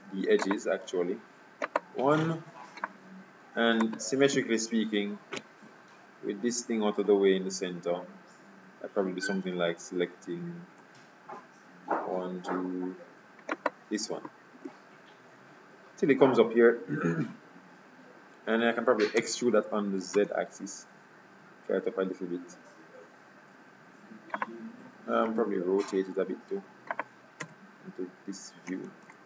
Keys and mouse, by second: 1.7-2.9 right drag, 4.4 KP_7, 13.7-15.4 right drag, 14.8 KP_3, 19.3 e, 25.3 r, 27.5 z, 29.0 ctrl+z.